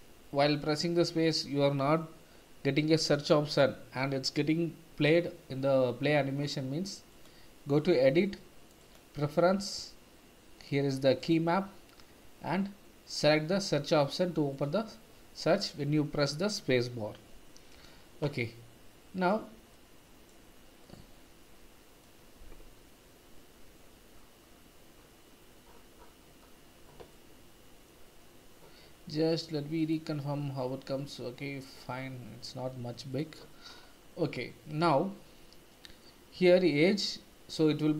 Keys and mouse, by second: 7.2-9.0 drag, 18.3 middle click, 19.7 middle click, 20.9-22.0 middle drag, 27.1 middle click, 29.8 click, 33.1 click, 34.4-36.0 middle drag, 36.8 middle click.